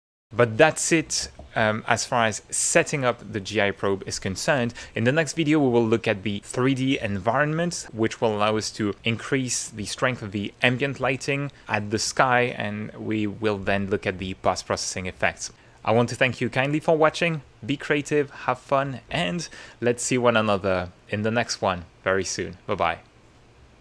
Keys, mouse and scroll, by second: 0.4 ctrl+middle click, 1.5 ctrl+shift+middle click, 2.3 shift+middle click.